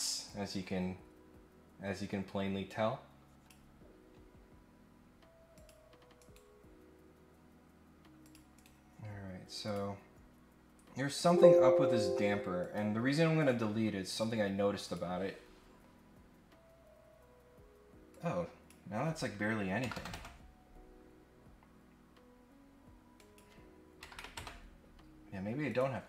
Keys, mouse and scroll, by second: 0.2-3.5 drag, 5.5 click, 6.2 right click, 8.2 click, 8.5 right click, 9.6 click, 11.1 click, 12.6 click, 13.3 click, 14.0 right click, 14.8 click, 18.1 click, 23.1 click, 25.7 click.